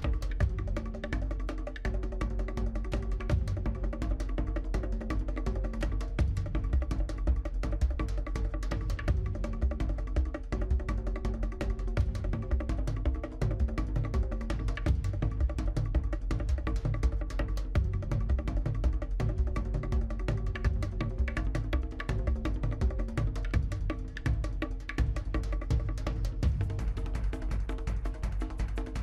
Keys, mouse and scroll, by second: 0.2 click, 0.6 middle click, 1.2 scroll down 3, 1.4 ctrl+click, 1.6 scroll up 2, 1.8 middle click, 2.0 shift+z, 2.1 middle click, 2.4 ctrl+click, 2.6-2.9 scroll up 2, 2.7 middle click, 2.9 shift+middle click, 3.1 shift+z, 3.2 middle click, 3.6 click, 4.0 middle click, 4.8 click, 5.2 middle click, 5.5 click, 5.9 scroll down 1, 5.9 middle click, 6.7 click, 7.1 shift+click, 7.1 scroll down 1, 7.2 shift+middle click, 7.8 click, 7.9 middle click, 8.1 click, 8.5 middle click, 9.0 middle click, 9.4 middle click, 9.5 click, 9.6 middle click, 9.8 click, 9.9 middle click, 10.6 g, 11.0 scroll down 1, 11.1 middle click, 11.3 g, 11.9 middle click, 12.1 g, 12.4 middle click, 12.9 click, 13.9 middle click, 14.3-16.6 drag, 16.6 middle click, 16.7 scroll up 3, 16.8 middle click, 17.1 click, 17.1 middle click, 17.6 middle click, 18.0 click, 18.2-18.8 scroll down 2, 18.3 middle click, 18.6 click, 18.8 middle click, 19.2 click, 19.8 middle click, 20.2 scroll up 2, 20.3 shift+middle click, 20.6 click, 20.7 middle click, 21.5 shift+click, 22.0 middle click, 22.9-25.1 typing, 23.2 middle click, 23.6 middle click, 24.2 click, 24.2 middle click, 24.6 scroll down 1, 24.6 middle click, 24.8 click, 24.9 middle click, 25.6 click, 25.9-26.2 scroll down 3, 25.9 middle click, 26.2 shift+middle click, 26.6-27.0 scroll up 3, 26.7 shift+middle click, 27.0 shift+middle click, 27.4 click, 27.5 middle click, 27.7 click, 27.9 middle click, 28.4 middle click, 28.6 click.